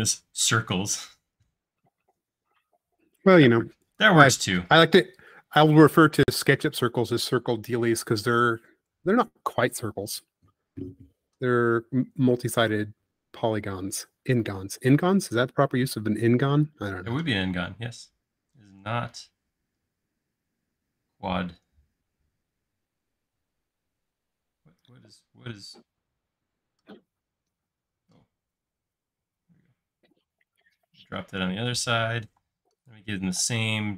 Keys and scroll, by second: 4.5 m, 7.1 m, 13.8 space, 15.1 m, 19.8 Up, 28.7 Right, 32.3 p.